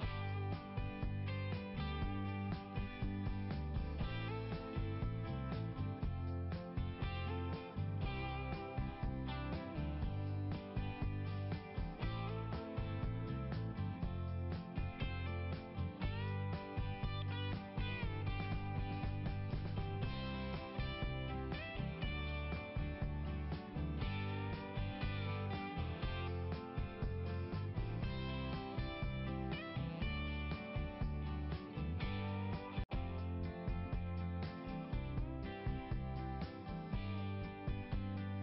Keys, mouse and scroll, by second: 0.3 click, 2.1-2.6 scroll up 2, 10.4-11.2 scroll up 4, 13.8 click, 14.3 click, 14.7 right click, 18.6 click, 20.1 click, 21.0 click, 21.2 click, 21.8 right click, 24.2 click, 28.2-29.4 scroll down 1, 29.6 click, 31.4 click, 32.0 click, 33.9 click, 34.5 click, 34.9 click, 38.2 right click.